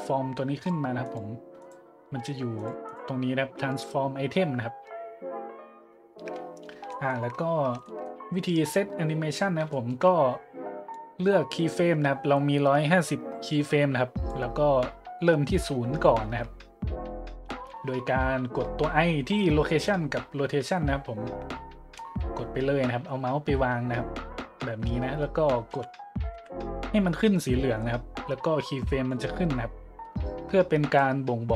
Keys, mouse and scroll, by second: 0.5 click, 1.0-1.4 drag, 1.6-1.9 drag, 2.6-3.2 drag, 6.9 shift+middle click, 7.8-8.2 shift+middle drag, 8.8 middle click, 9.4 middle click, 9.7-10.0 shift+middle drag, 10.9-14.3 drag, 17.8 middle click, 25.7 i, 26.3 i, 29.1-31.0 drag.